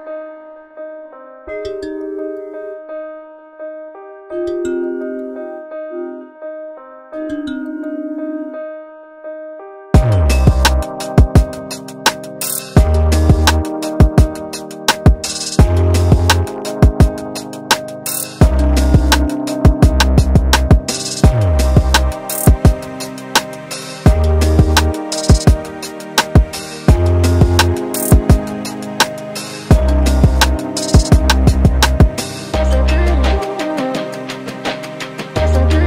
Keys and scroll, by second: 14.5 ctrl+d, 24.1 ctrl+t, 32.3 ctrl+t.